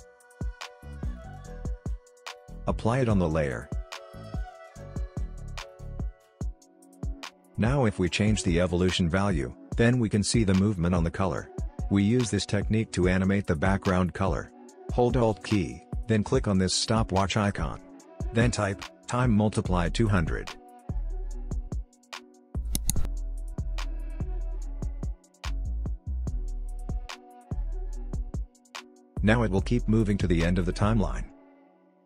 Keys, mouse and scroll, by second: 1.3-5.8 drag, 5.7 scroll up 1, 9.3-13.3 drag, 13.3 ctrl+z, 16.2 alt+click, 17.9-19.2 typing, 26.9 click, 29.4 typing.